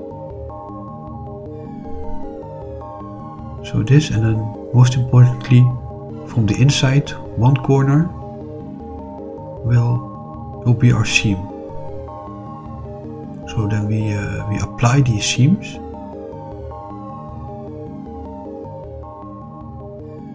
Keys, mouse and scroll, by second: 0.3 middle click, 2.0 shift+click, 2.4 middle click, 4.3-9.9 middle drag, 11.9 shift+click, 12.6-19.8 middle drag.